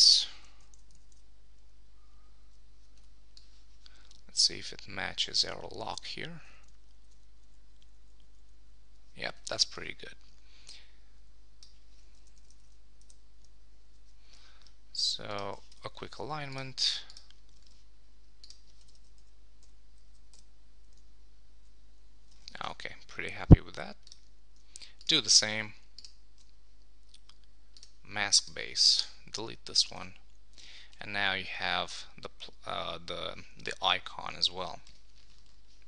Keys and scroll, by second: 0.4 Right, 0.9 Left, 6.2 Right, 6.9 Down, 8.0 Right, 12.4 Right, 12.5 Down, 13.0 Left, 18.0 super+s, 19.1 Right, 20.3 Left, 22.3 super+s, 29.7 Return, 33.0 super+s.